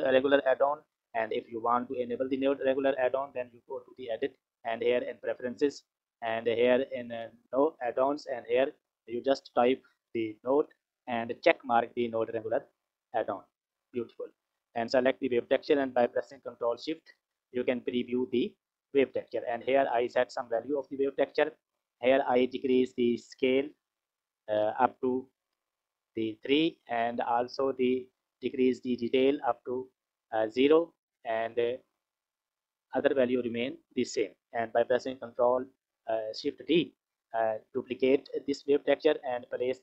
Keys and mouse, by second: 2.4-5.4 drag, 13.5 click, 14.3 click, 16.7 ctrl+shift+click, 23.2 click, 24.5-26.1 drag, 28.8 click, 33.6 click, 36.4 shift+d, 39.1 click.